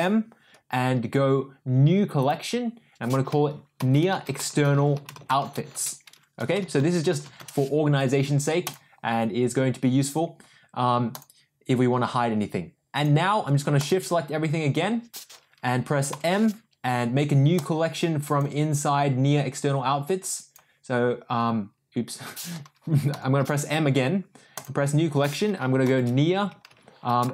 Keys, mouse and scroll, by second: 11.1 click, 12.9 click, 13.7 shift+click, 16.1 m, 23.1 m.